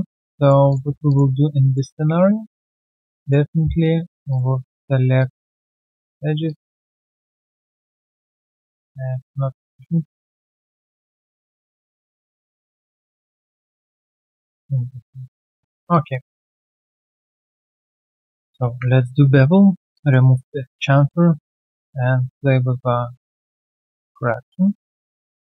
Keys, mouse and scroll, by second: 0.1 alt+right click, 0.3 alt+middle click, 0.8 1, 1.0 alt+click, 1.3 alt+middle click, 1.6 alt+right click, 2.1 right click, 3.7 double click, 4.1 shift+click, 5.6 alt+scroll down 1, 5.9 alt+middle click, 6.4 alt+click, 6.8 alt+middle click, 7.1 alt+right click, 7.3 alt+click, 7.9 alt+click, 8.2 shift+click, 8.4 shift+double click, 9.2 right click, 10.7 right click, 10.8 shift+click, 11.0 shift+double click, 11.7 ctrl+right click, 13.9 ctrl+click, 14.0 ctrl+double click, 14.7 alt+double right click, 15.3 alt+middle click, 15.7 alt+right click, 15.9 alt+click, 16.2 alt+middle click, 16.5 alt+right click, 16.8 alt+click, 17.0 alt+scroll up 1, 17.1 alt+middle click, 18.6 ctrl+b, 25.0 alt+click, 25.3 alt+middle click.